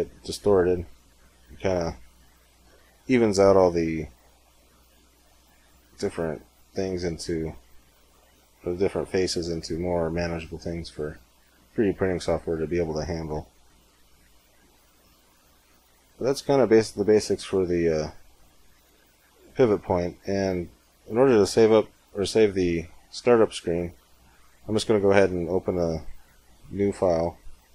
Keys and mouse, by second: 1.4 Tab, 2.0 Tab, 2.4 z, 2.8 z, 3.2 z, 7.8 middle click, 9.5-11.0 middle drag, 11.8 middle click, 13.2 Tab, 16.2 middle click, 18.2-21.4 drag, 21.4 right click, 22.2 x.